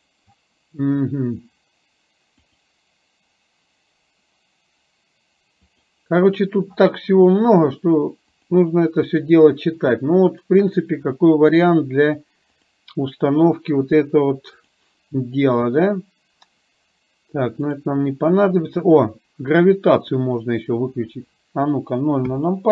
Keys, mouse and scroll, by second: 2.5 click, 5.6 click, 8.5 click, 9.2 click, 9.8 click, 10.3 click, 12.6 click, 14.7-17.6 drag, 20.2 click, 22.2 KP_0.